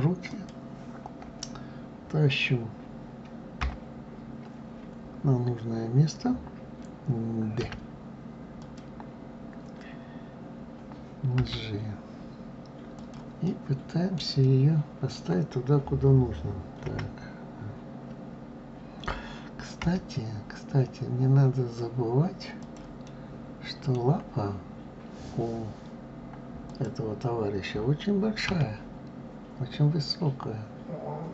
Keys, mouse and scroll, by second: 3.4 KP_3, 7.4 d, 8.4 click, 11.2 g, 13.2-16.6 middle drag, 16.6 KP_1, 19.6 g, 22.8-25.9 middle drag, 26.5 click, 28.2 r.